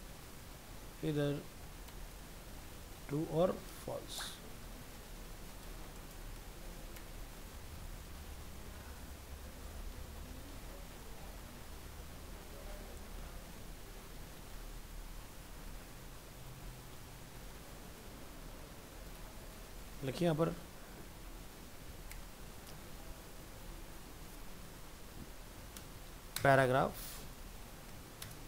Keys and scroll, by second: 1.3 ctrl+Left, 10.6 ctrl+s.